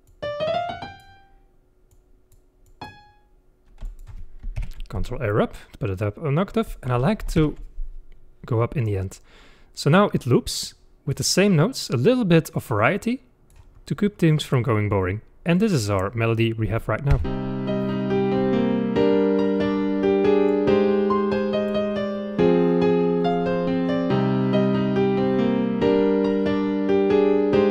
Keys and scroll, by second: 4.6 ctrl+Up, 7.5 ctrl+Up, 17.2 space.